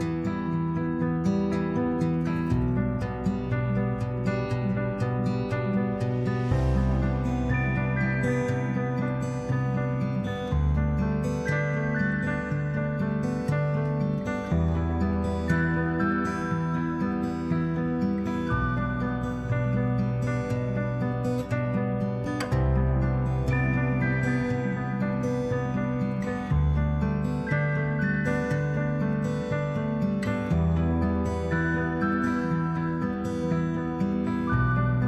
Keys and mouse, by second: 6.5 shift+middle click, 8.0-10.8 ctrl+right drag, 11.3 click, 14.1 ctrl+middle click, 14.9 g, 15.3 y, 16.2 x, 17.3 click, 18.0 shift+middle click, 18.7 click, 19.1 shift+middle click.